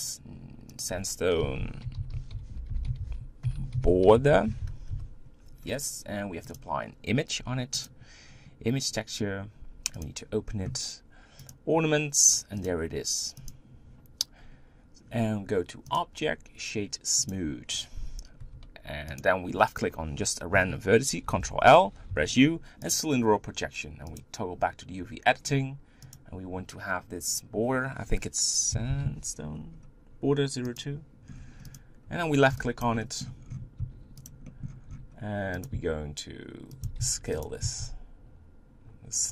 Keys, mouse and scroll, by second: 0.2 click, 0.8-5.0 drag, 7.1-10.2 drag, 14.3-15.1 scroll up 2, 15.8-18.5 drag, 18.5 Tab, 19.2 click, 21.2 ctrl+l, 22.9 u, 24.2-25.8 drag, 26.1-30.9 drag, 31.7 click, 32.8 b, 33.0-34.0 middle drag, 34.0 s, 34.9 g, 35.7 s, 36.8 s.